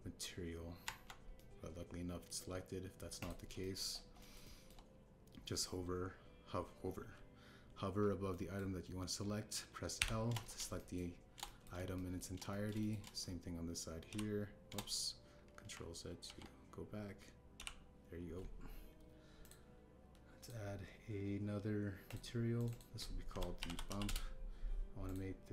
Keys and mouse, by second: 0.5 Tab, 1.8 Tab, 2.3 click, 4.1 click, 4.5 shift+click, 5.1 shift+click, 5.4 shift+click, 9.3 middle click, 10.9 l, 11.7 shift+middle click, 12.4 middle click, 12.9 shift+middle click, 13.4 middle click, 13.5 click, 13.7 shift+click, 15.0 l, 17.2 ctrl+z, 18.5 l, 20.4 click, 21.3 click, 23.0 click, 23.5-25.0 drag.